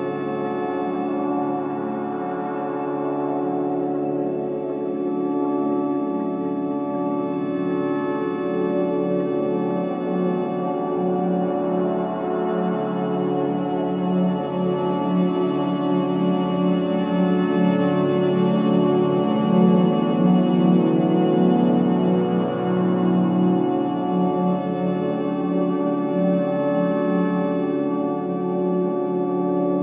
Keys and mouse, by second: 0.6 g, 3.9 g, 7.9 click, 8.7 s, 15.7 click, 16.7 g, 20.4-22.9 drag, 23.9 click, 24.6-27.7 drag.